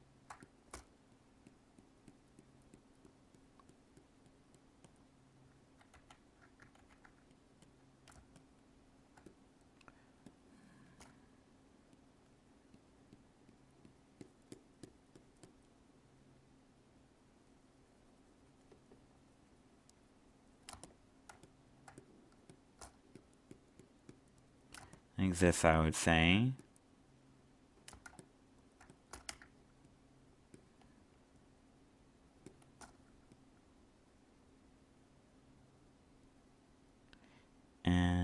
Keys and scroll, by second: 5.9 ctrl+z, 8.1 alt+space, 21.3 alt+space, 24.7 alt+space, 28.0 alt+space.